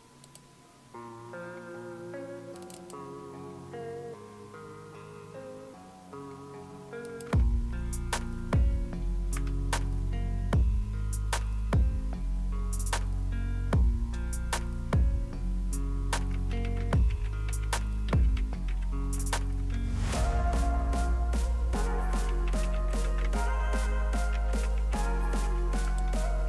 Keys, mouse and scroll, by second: 0.2 click, 2.6 click, 7.1 click, 9.3 Return, 19.5-20.2 typing, 22.3-26.4 typing, 25.9 click.